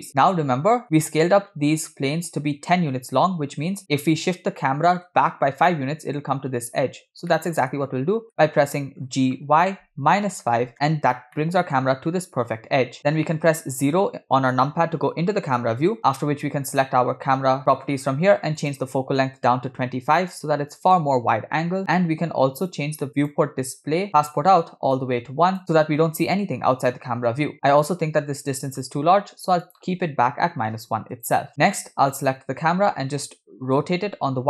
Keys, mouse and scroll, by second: 0.3-0.8 middle drag, 4.6-5.0 middle drag, 7.4 middle click, 8.4-9.0 middle drag, 9.1 g, 11.4-11.9 middle drag, 11.9-13.6 scroll up 3, 13.8 KP_0, 16.7 click, 18.6-20.9 drag, 23.2 click, 23.9 scroll down 4, 25.0 click, 27.6 click, 29.7-31.2 drag, 32.1 click, 33.8 r.